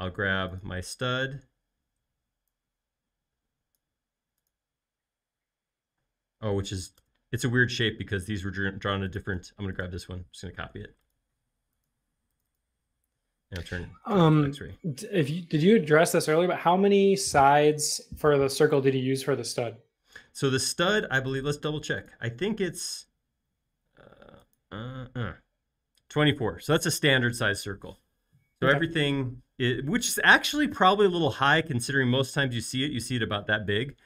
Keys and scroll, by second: 6.1 space, 6.7 space, 7.0 BackSpace, 10.7 super+c, 14.2 v, 14.8 v, 15.1 x, 17.1 super+v, 20.5 space.